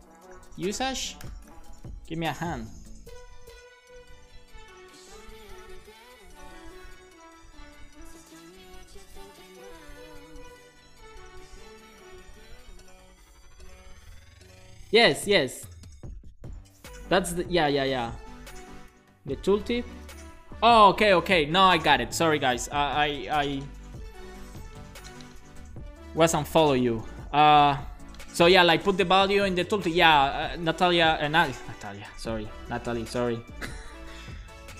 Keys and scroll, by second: 0.9-2.1 typing.